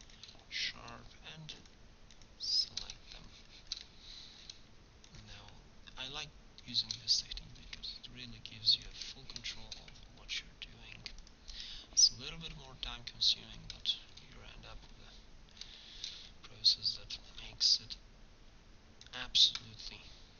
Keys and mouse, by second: 3.1 middle click, 6.0-7.1 drag, 8.9 middle click, 10.2 ctrl+e, 13.5 Tab, 17.4 Tab, 18.7 middle click.